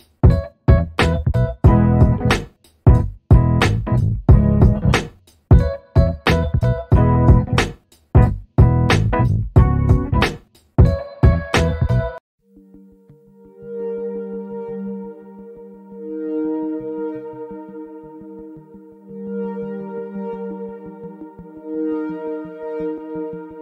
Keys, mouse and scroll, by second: 0.4 alt+scroll up 1, 1.0-1.4 scroll up 1, 1.4 alt+middle click, 3.2 click, 5.0 Escape, 5.7 scroll down 1, 6.8 click, 7.4-7.8 scroll up 1, 7.8 alt+middle click, 8.4 alt+scroll down 2, 9.1 middle click, 9.8 alt+click, 20.5 click, 20.9 double click, 22.2 ctrl+click.